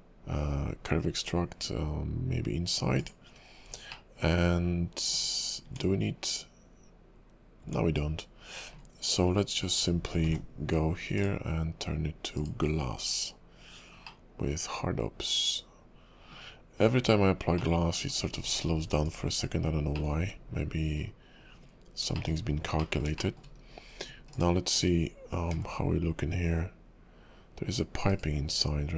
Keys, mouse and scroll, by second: 3.2-3.7 scroll up 2, 3.7 scroll down 2, 3.9 middle click, 5.6 Tab, 7.6 Tab, 9.2 scroll down 2, 10.3 alt+m, 12.4 click, 19.0 /, 19.6-19.9 scroll down 3, 19.9 middle click, 20.2 `, 20.5 KP_5, 20.9 scroll up 1, 21.0 KP_5, 21.5-22.1 scroll up 3, 22.1 shift+middle click, 22.3 scroll up 1, 22.8 middle click, 23.5 KP_5, 24.3 click, 25.5 g, 28.5 scroll up 2.